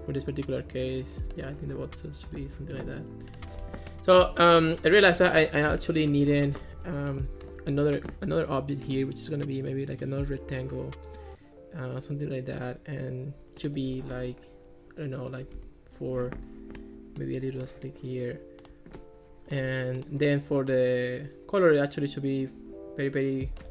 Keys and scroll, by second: 3.7 Escape, 15.5 4, 15.6 Return.